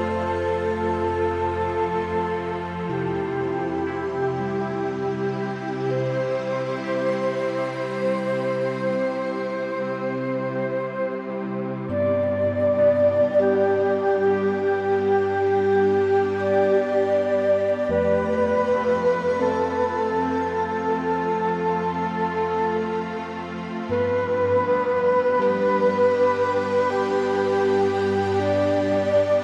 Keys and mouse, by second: 0.1 shift+middle click, 0.3 middle click, 0.6 s, 1.9 click, 2.1 s, 2.4 x, 2.6 z, 4.6 click, 5.4 g, 5.6 z, 6.4 shift+middle click, 6.7 middle click, 8.5 `, 9.3 g, 10.1 click, 11.1 click, 11.5 shift+middle click, 11.8-13.1 drag, 13.1 `, 13.6 middle click, 14.3 click, 14.8 g, 16.4 click, 17.1 Tab, 17.8 ctrl+r, 19.1 a, 19.4 ctrl+r, 22.4 Tab, 22.8 middle click, 23.3 middle click, 26.1 g, 27.4 Tab, 28.1 middle click, 28.6 click, 28.8 Tab, 29.2 Tab.